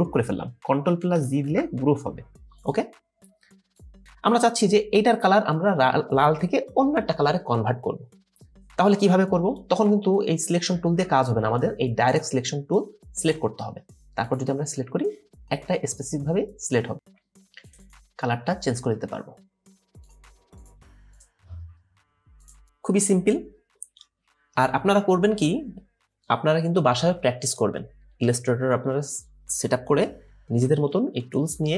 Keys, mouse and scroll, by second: 1.4 ctrl+g, 12.1 right click, 17.8 double click, 22.6 double click.